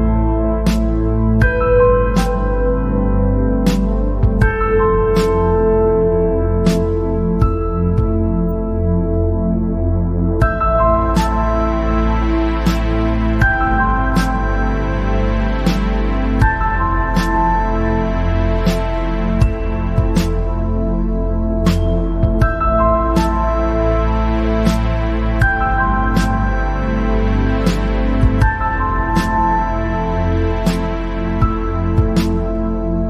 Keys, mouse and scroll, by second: 2.7-3.2 scroll down 7, 3.4-3.7 scroll up 3, 3.7 scroll down 1, 3.8-6.0 middle drag, 6.0 click, 6.9 scroll up 3, 8.0 click, 12.1 ctrl+z, 12.7-13.3 scroll down 3, 13.3 scroll up 2, 14.4-16.6 drag, 16.9 scroll up 4, 17.4 scroll down 1, 17.9-19.0 middle drag, 19.0-19.5 scroll down 7, 19.5-20.5 middle drag, 20.5-22.1 drag, 22.4-24.0 right drag, 24.0 click, 24.4 scroll up 1, 24.7-26.9 right drag, 26.9 click, 28.1-29.2 scroll down 5, 29.2 click, 29.5 scroll down 4, 30.4 click, 32.1 scroll up 2, 32.5 click.